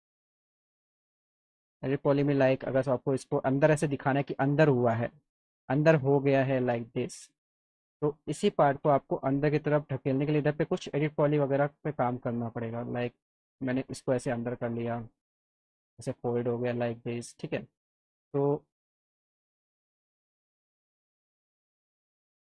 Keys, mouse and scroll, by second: 1.5 click, 5.9 click, 7.2 click, 8.0 alt+middle click, 9.0 F3, 10.2 alt+middle click, 11.5 click, 12.0 alt+middle click, 13.4 click, 14.7 F3, 18.9-20.4 drag, 20.6 alt+middle click, 21.2 alt+middle click, 22.4 click.